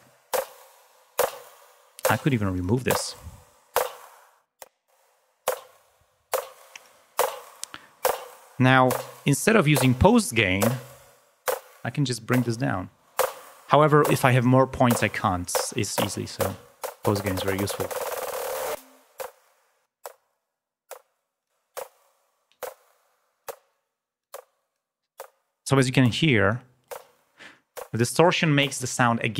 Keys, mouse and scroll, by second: 0.8-1.9 drag, 2.6 click, 3.7-7.1 drag, 10.9 click, 13.0 click, 15.0 click, 18.9 click, 19.8 click, 21.4 click, 23.4 click, 24.2 click, 26.5 click.